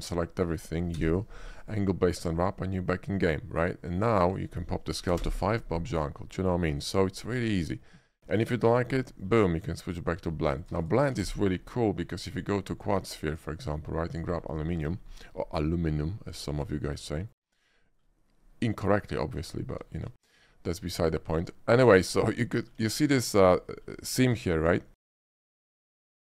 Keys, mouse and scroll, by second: 0.1 a, 1.0 u, 1.7 click, 2.3 Tab, 2.8 middle click, 4.3 click, 5.3 5, 6.8 middle click, 7.1 middle click, 8.0 Return, 8.0 middle click, 8.2 ctrl+z, 8.6 middle click, 9.2 middle click, 9.9 click, 10.7 click, 10.8 x, 10.9 click, 11.3 shift+a, 12.3 click, 13.4 click, 14.2 click, 14.8 middle click, 15.2 shift+middle click, 16.5 scroll up 1, 17.0 shift+middle click, 17.2 shift+middle drag, 17.9 shift+middle click, 21.0 shift+click, 22.0 shift+middle drag, 22.5-22.8 shift+middle drag, 23.0 shift+middle drag, 23.4-23.8 middle drag, 24.3 shift+middle click, 24.7 shift+middle click, 25.0-26.2 middle drag.